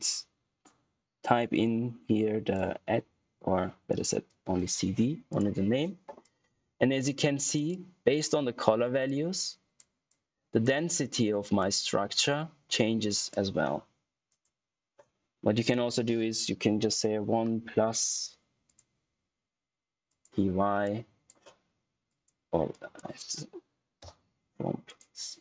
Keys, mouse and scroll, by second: 1.5 shift+Num_Lock, 3.1 q, 4.0 shift+c, 4.4 d, 5.2-13.4 drag, 17.0 1, 18.6 click, 24.8 click.